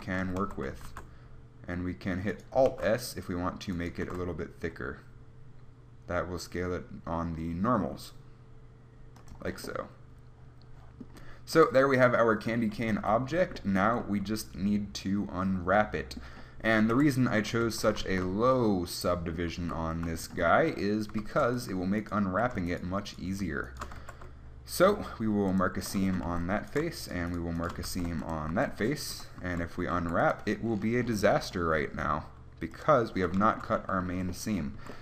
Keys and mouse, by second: 0.1 Tab, 0.7 a, 1.1 alt+s, 2.9 alt+s, 4.3 alt+s, 9.6 Tab, 11.8 KP_1, 13.2 Tab, 14.1 a, 17.2 KP_1, 17.9 Tab, 18.3 z, 19.7 z, 20.5 Tab, 21.5 ctrl+Tab, 24.3 ctrl+e, 26.5 a, 28.1 ctrl+e, 28.8 a, 29.4 KP_1, 29.7 a, 30.3 u, 33.0-35.0 drag, 34.4 a.